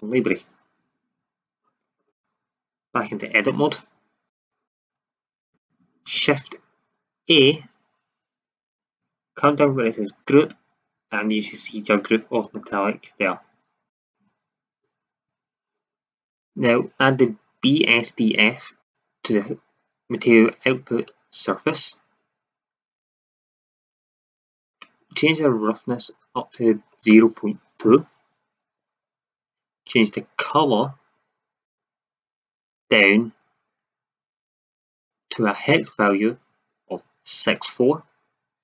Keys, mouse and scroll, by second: 0.3-2.1 drag, 3.0 Tab, 4.2-4.6 drag, 5.0 Tab, 7.4 shift+a, 15.4 shift+z.